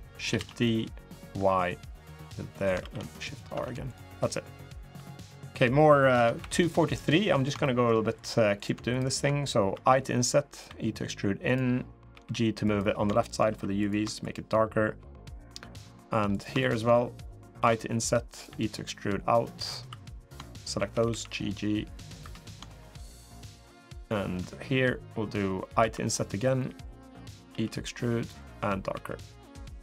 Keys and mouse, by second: 0.1 shift+d, 2.6 shift+r, 3.3 Tab, 3.6 click, 4.0 middle click, 4.7 3, 5.0 click, 5.9 Tab, 6.1 3, 7.4 shift+middle click, 7.9 click, 8.3 click, 9.5 i, 10.4 e, 11.9 g, 12.9 shift+middle click, 13.3 3, 13.5 click, 14.0 shift+click, 15.7 click, 16.1 click, 17.3 i, 18.2 e, 19.8 2, 20.7 g, 22.0 3, 25.6 i, 27.3 e, 28.8 g, 29.6 3.